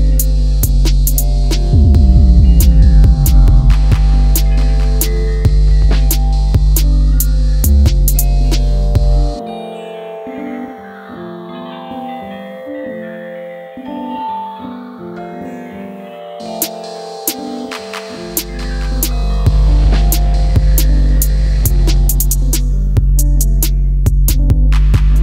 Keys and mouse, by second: 0.3 click, 0.4 e, 1.3 click, 1.7 e, 2.5 click, 2.7 e, 4.2 click, 4.3 e, 5.3 click, 7.1 click, 7.1 e, 7.4 e, 8.1 click, 10.3 click, 12.0 click, 12.1 click, 12.5 click, 12.9 click, 13.1 click, 13.3 click, 13.4 click, 13.5 click, 13.6 click, 14.0 click, 14.7 click, 15.2 click, 15.7 click, 16.2 click, 16.3 click, 16.4 click, 16.7 click, 17.6 click, 18.6 click, 20.2-21.2 drag, 22.6 click, 23.9 click, 24.2 click.